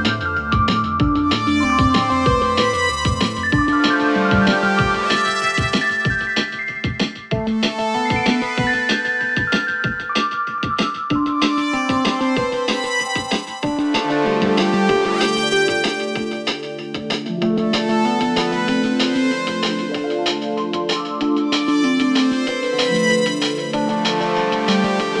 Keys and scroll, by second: 2.2 Delete, 3.4 shift+f, 9.8 ctrl+z, 11.6 4, 12.1 3, 15.0 4, 15.4 1, 18.0 3, 20.6 4, 23.1 3.